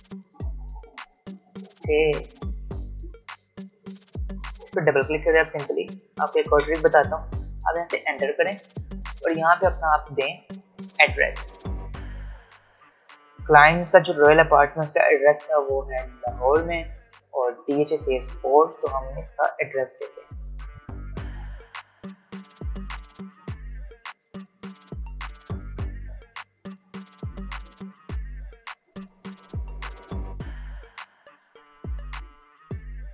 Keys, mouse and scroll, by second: 1.6 ctrl+z, 3.8 ctrl+shift+z, 4.8 click, 6.4 Right, 7.8 Return, 20.9-25.3 typing, 26.7 space, 28.7-29.6 typing, 31.2 Return, 32.4-33.1 typing.